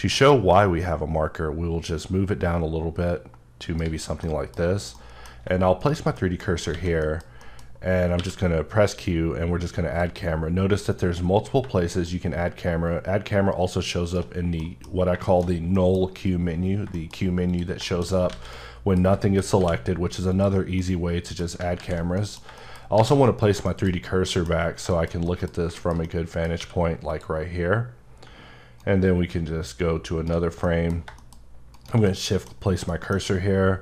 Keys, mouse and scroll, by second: 0.5 right click, 4.2 middle click, 4.6 scroll up 1, 5.0 middle click, 5.8 right click, 6.1 middle click, 6.7 a, 6.9-7.4 scroll up 2, 7.0 middle click, 7.4 middle click, 8.1 q, 9.7 click, 10.5-11.4 scroll down 2, 12.0-14.1 shift+right drag, 14.6 middle click, 14.9-15.2 scroll down 1, 15.2 middle click, 15.4-15.7 scroll down 1, 15.7 middle click, 16.7-17.5 scroll down 2, 17.5 click, 17.9 middle click, 18.1 scroll down 1, 18.3 alt+a, 18.5 middle click, 19.2 shift+middle click, 20.3 click, 20.8 middle click, 21.8 z, 22.2 middle click, 22.9 shift+c, 23.6 shift+middle click, 24.3 middle click, 24.5-24.9 scroll up 3, 24.9 shift+middle click, 25.1-25.8 scroll down 2, 25.2 middle click, 25.8 shift+middle click, 26.6 q, 27.1 click, 27.7-28.3 scroll up 2, 29.1-30.3 shift+right drag, 30.6 middle click, 31.7 shift+right click, 32.1 middle click, 32.5-32.9 scroll up 2, 32.9 middle click.